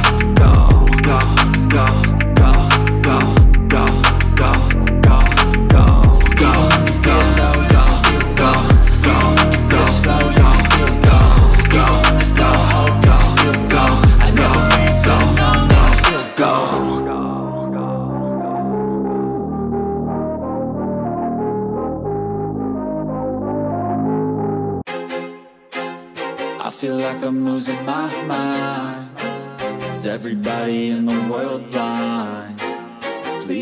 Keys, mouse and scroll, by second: 12.1 click, 12.5 scroll up 1, 12.6 click, 12.7 scroll down 1, 12.8 middle click, 13.6 Tab, 13.8 ctrl+click, 14.3 shift+middle click, 14.7 1, 14.8 click, 17.0 shift+middle click, 17.2 scroll up 1, 17.7 click, 18.9 space, 19.1 click, 19.5 space, 19.7 c, 19.9 c, 19.9 click, 20.1 ctrl+x, 20.2 ctrl+scroll up 4, 20.2 shift+middle click, 20.5 alt+click, 20.6 scroll down 2, 20.7 shift+middle click, 20.8 scroll up 1, 21.2 click, 21.5 ctrl+x, 21.7 shift+middle click, 21.8 1, 21.9 scroll up 1, 22.0 click, 22.2 shift+middle click, 22.4 g, 22.9 click, 23.2 shift+middle click, 23.6 g, 24.0 click, 24.4 g, 24.7 click, 24.9 scroll down 1, 25.0 shift+middle click, 25.1 scroll up 1, 25.2 click, 25.4 g, 25.5 g, 25.8 click, 26.0 g, 26.1 g, 26.5 click, 26.7 scroll down 1, 26.7 shift+middle click, 26.8-27.4 scroll up 2, 27.2 click, 27.3 shift+middle click, 27.5-28.0 scroll down 2, 28.0 shift+middle click, 28.8 click, 29.1 scroll down 1, 29.2 scroll up 2, 29.4 shift+middle click, 29.7 ctrl+click, 29.8 right click, 30.0 shift+middle click, 30.1 click, 30.5 click, 30.6 ctrl+r, 30.8 ctrl+click, 30.8 right click, 31.0 click, 31.2 space, 31.4 c, 31.5 click, 31.8 ctrl+middle click, 32.0 1, 32.2 click, 32.6 scroll up 1, 32.9 shift+middle click, 33.0 click.